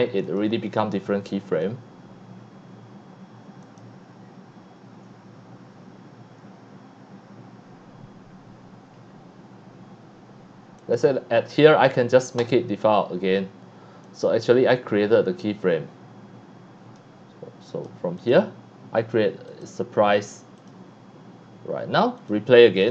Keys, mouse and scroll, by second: 0.2 click, 1.5 click, 3.6 click, 10.8 click, 12.4 click, 14.0-15.7 drag, 17.7 click, 18.2 click, 19.5 click, 20.6 click, 22.2 click, 22.8 click.